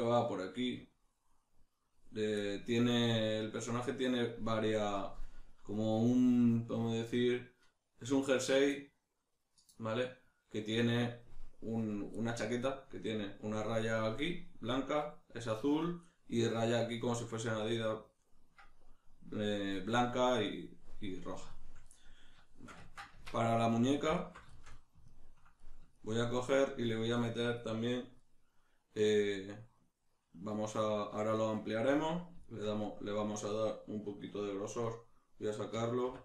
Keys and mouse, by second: 2.4 middle click, 6.9-23.6 middle drag, 23.1 Tab, 23.6 right click, 24.2 alt+right click, 24.5-27.2 shift+middle drag, 36.0 \.